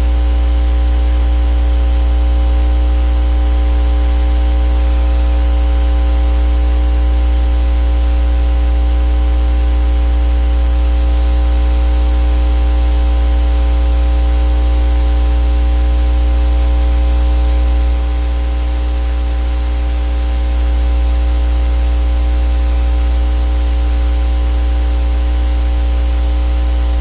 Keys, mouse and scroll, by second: 3.2 click, 4.8-6.3 drag, 7.6 click, 9.0-9.8 drag, 10.8 click, 11.7-16.6 drag, 17.1 click, 17.6 click, 18.8 KP_1, 19.0 KP_Enter, 22.4 click, 24.8-27.0 ctrl+shift+drag.